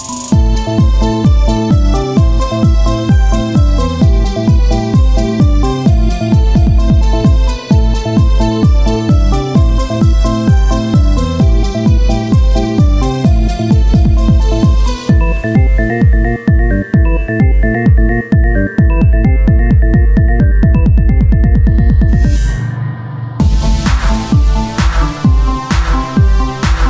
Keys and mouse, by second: 1.0-2.2 right drag, 2.0 c, 4.0-7.2 drag, 4.0 c, 4.7-6.4 right drag, 5.4 c, 6.6-7.8 right drag, 7.8-9.6 drag, 7.8 c, 8.4 e, 11.2 s, 12.3 e, 13.0 ctrl+z, 13.5 e, 16.3 Tab, 17.6 Tab, 17.6 z, 20.3-23.5 drag.